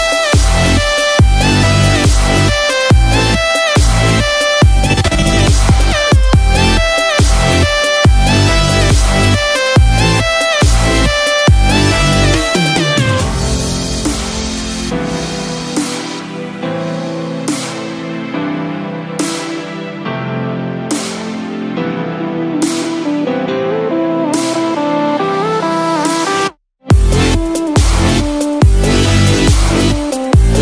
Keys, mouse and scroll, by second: 1.2-1.6 scroll down 1, 1.8 scroll up 1, 15.9 click, 27.6 click.